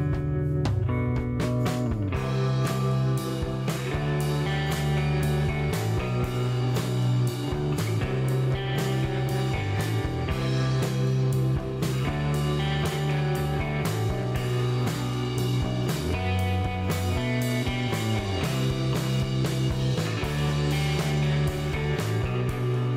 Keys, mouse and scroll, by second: 1.3 middle click, 1.5 g, 2.1 click, 2.3 s, 3.1 click, 3.2 g, 5.4 g, 7.5-9.6 typing, 8.8 click, 10.6 middle click, 11.8 click, 15.4-20.8 typing, 17.8 click, 18.5 click, 20.4 click, 22.2 s.